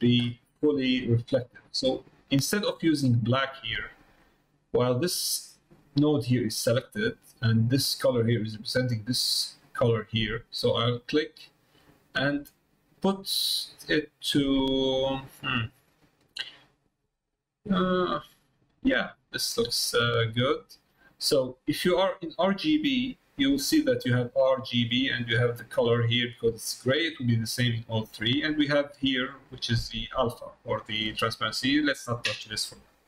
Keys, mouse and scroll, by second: 4.1 click, 5.3-7.0 drag, 11.1 click.